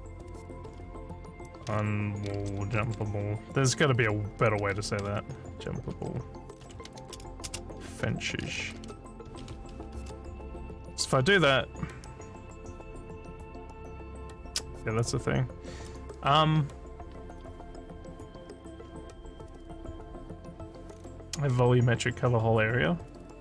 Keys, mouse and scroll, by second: 2.0-2.9 typing, 5.9 a, 6.9-9.2 typing.